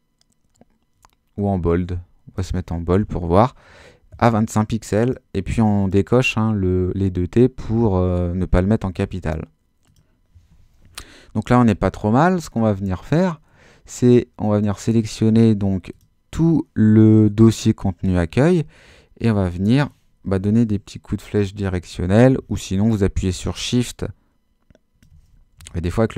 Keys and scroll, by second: 20.4 Down, 25.6 shift+super+z.